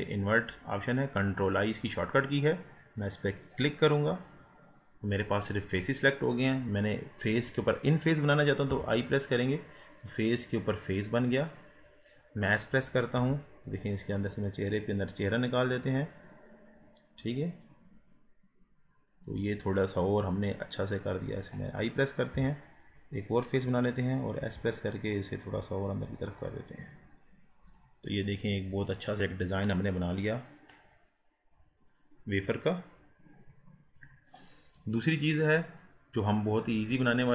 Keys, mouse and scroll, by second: 4.4-13.2 middle drag, 13.2 s, 15.7 scroll down 3, 16.4 scroll up 2, 16.8-20.6 middle drag, 20.6-21.2 scroll up 1, 21.2-22.4 middle drag, 22.4 i, 24.4 s, 27.7-29.0 drag, 29.0-30.2 middle drag, 30.2 scroll up 1, 30.4-31.4 scroll down 7, 31.4-32.0 scroll up 2, 32.0-34.7 middle drag, 34.7 scroll down 5, 35.1-35.5 scroll up 2, 35.5 click, 36.8 KP_1.